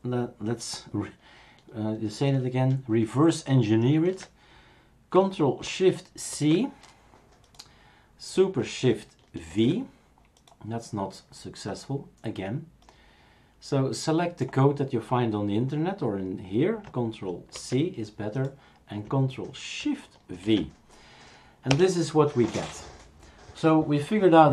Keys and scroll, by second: 6.3 ctrl+shift+c.